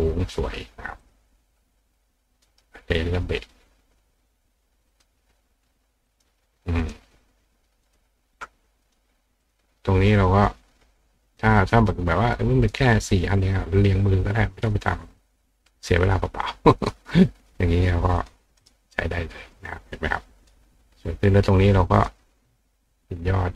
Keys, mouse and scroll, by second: 1.0 click, 2.5 right click, 4.9 click, 6.1 click, 6.8 click, 7.9 click, 8.9 click, 9.4 click, 10.5 click, 11.9 click, 16.8 click, 18.2 click, 18.6 right click, 20.1 click, 22.0 click.